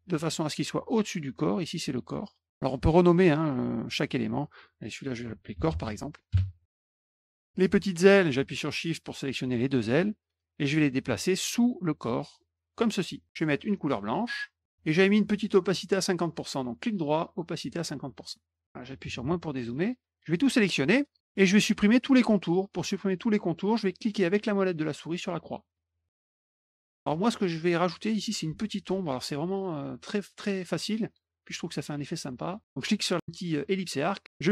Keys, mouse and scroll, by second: 1.4 click, 4.2 click, 4.3 click, 5.0-6.3 typing, 6.9 middle click, 7.6 click, 8.9 shift+click, 10.3-12.7 drag, 14.5 click, 16.6 right click, 17.6 click, 20.1 click, 25.5 middle click, 26.2 click, 26.4 middle click, 26.5 middle click, 33.7 click, 34.3-34.5 drag.